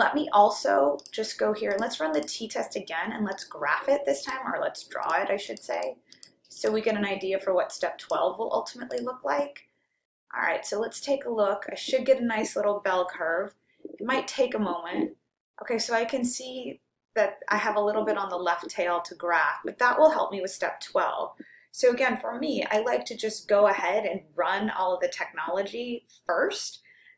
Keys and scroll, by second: 1.7 Right, 2.2 Right, 3.6 Down, 4.2 Return, 5.1 Down, 5.5 Down, 5.9 Down, 6.5 Down, 7.0 Down, 8.0 Right, 8.9 Return.